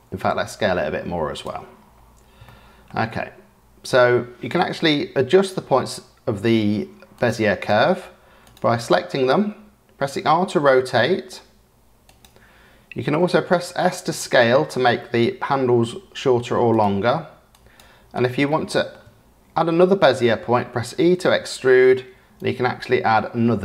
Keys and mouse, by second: 0.1 s, 2.5 shift+middle click, 4.5 KP_7, 7.1 click, 8.9 click, 10.0 r, 13.2 s, 17.5 click, 18.5 shift+click, 20.9 e.